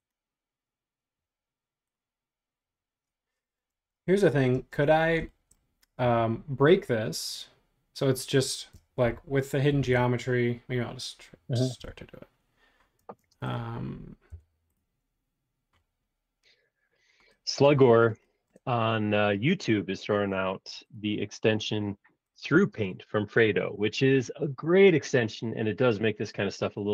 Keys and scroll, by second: 3.7 super+z, 4.5 space, 9.0 shift+g, 9.7 shift+g, 11.8 l, 13.0 space, 14.3 l.